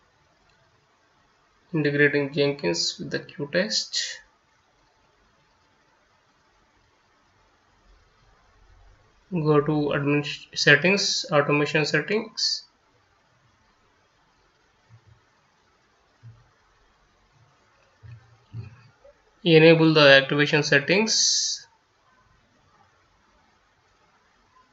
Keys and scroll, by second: 0.0-1.7 typing, 2.9 Return, 4.6 F9.